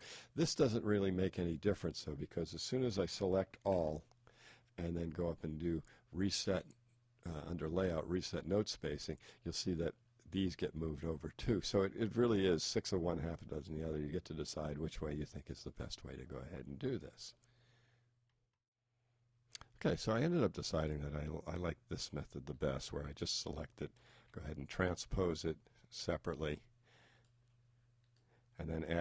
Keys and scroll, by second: 3.7 super+a, 24.2 shift+t.